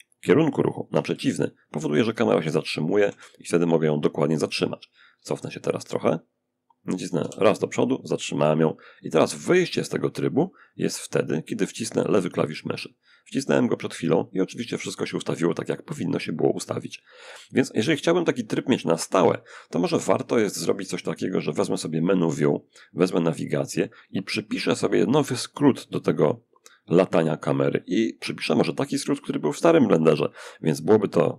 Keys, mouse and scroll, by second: 0.2 d, 1.0 d, 2.3 a, 4.4 s, 6.4 w, 10.2 click, 20.1 click, 30.7 right click.